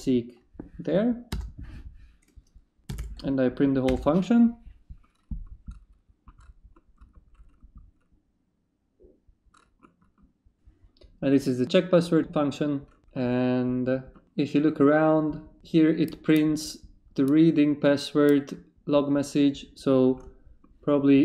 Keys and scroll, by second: 1.3 Return, 2.6-3.5 typing, 3.9 Return.